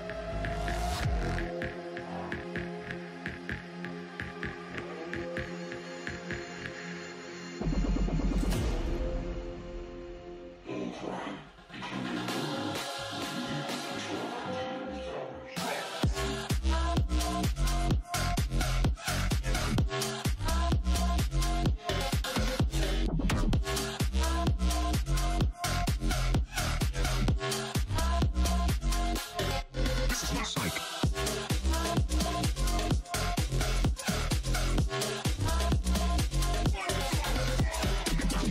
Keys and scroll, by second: 0.2 3, 0.9 0, 27.8 d, 28.6 e, 30.8 c, 31.7 0, 33.2 d.